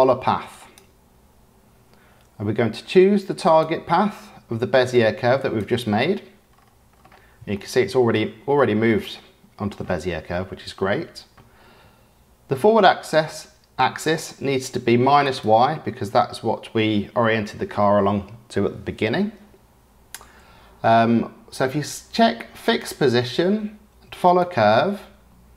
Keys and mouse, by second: 3.4 click, 7.5-8.1 shift+middle drag, 9.0-9.7 shift+middle drag, 15.2 click, 22.6 click, 24.2 click.